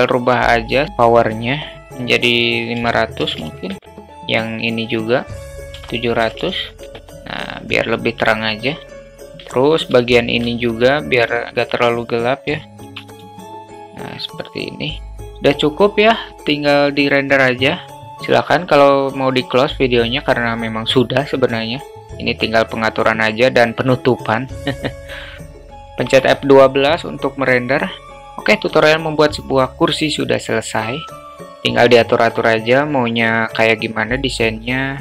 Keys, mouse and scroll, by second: 1.1-4.0 drag, 3.4 0, 5.4-7.0 drag, 6.4 0, 9.0 middle click, 9.6 alt+middle click, 10.0 alt+shift+middle drag, 11.5 click, 12.9 shift+d, 16.3 click, 16.8-17.8 drag.